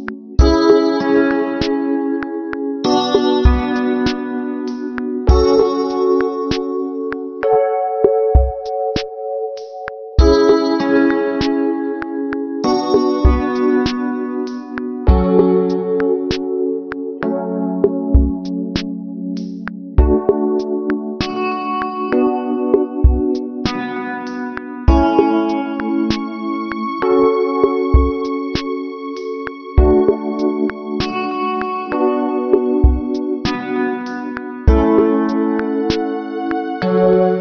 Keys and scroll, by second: 23.5 ctrl+-, 24.7 ctrl+=, 25.9 space, 28.2 space.